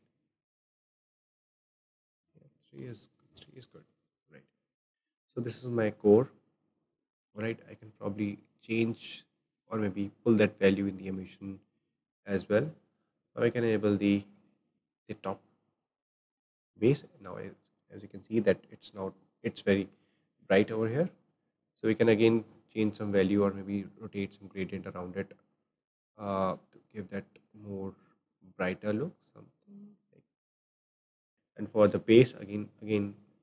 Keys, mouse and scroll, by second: 6.5 scroll down 2, 6.9 shift+middle click, 7.4-8.1 scroll down 2, 8.9 click, 11.3 click, 13.4 drag, 14.7 click, 15.7-16.5 scroll down 3, 20.5 click, 21.5 scroll up 2, 22.1-22.9 scroll up 2, 22.9-23.4 shift+middle drag, 23.4-23.7 scroll up 3, 24.2-27.2 drag, 31.7 click, 32.4 click, 33.2 click.